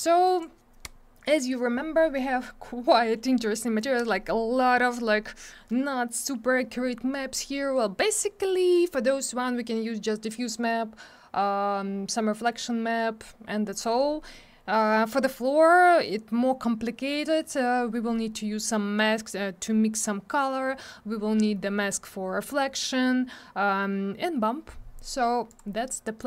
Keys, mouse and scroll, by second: 0.2 click, 0.4 click, 2.9 click, 25.5 click, 25.5 click.